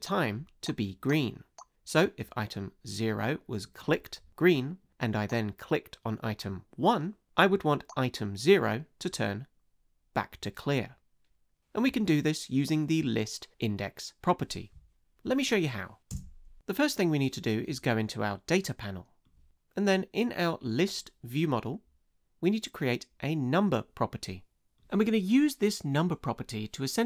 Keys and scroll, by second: 16.1 space.